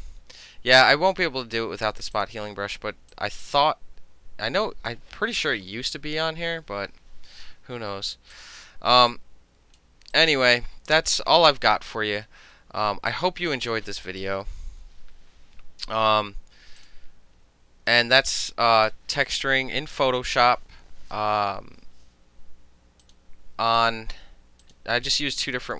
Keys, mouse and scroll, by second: 2.2 click, 3.2-5.0 drag, 6.1 ctrl+-, 6.6 ctrl+-, 7.3-8.4 middle drag, 8.4 click, 8.5 middle click, 9.2 click, 9.8 middle click, 10.2-11.4 drag, 11.4 middle click, 12.9 space, 13.2 click, 14.8 ctrl+0, 16.9 click, 16.9-18.0 middle drag, 18.0 click, 18.9-20.2 middle drag, 23.1 click, 23.9 click, 24.7 click, 25.5 click.